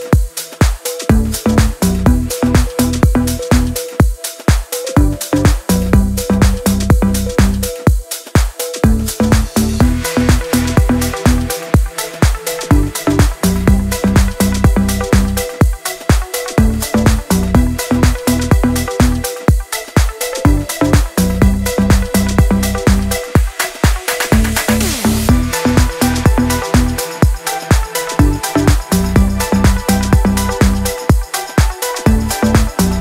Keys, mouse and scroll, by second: 1.6 p, 2.0 click, 5.4 scroll up 1, 5.8 click, 6.0-6.4 scroll up 1, 6.4 click, 8.8 shift+click, 9.6 c, 9.9 click, 12.0 scroll up 1, 14.4 click, 16.3-17.4 typing, 17.6 scroll down 1, 19.4 space, 21.0 Left, 22.6 w, 23.0 Right, 23.9 a, 25.6 typing, 26.8-27.5 typing, 29.2-30.3 typing.